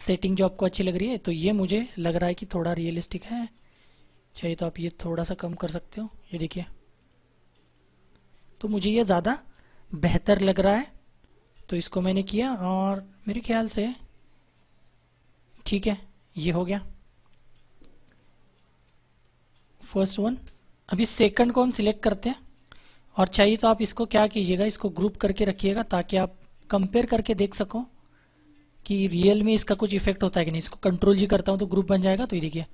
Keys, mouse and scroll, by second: 3.0 click, 13.1 click, 17.3 click, 18.8 space, 19.1 click, 19.3 space, 22.3 click, 28.8 shift+click, 31.1 ctrl+g.